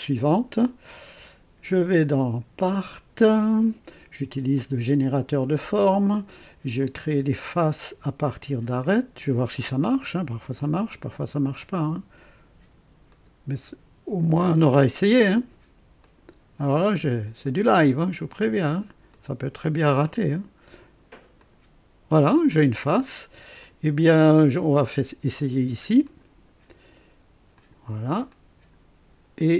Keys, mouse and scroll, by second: 1.8 click, 4.5 click, 6.7 click, 9.5 click, 11.0 click, 13.0 click, 14.8 click, 16.0 ctrl+click, 17.4 ctrl+click, 19.1 ctrl+click, 20.2 ctrl+click, 21.3 ctrl+click, 23.5 click, 26.0 click, 27.5 click, 28.3-28.9 drag.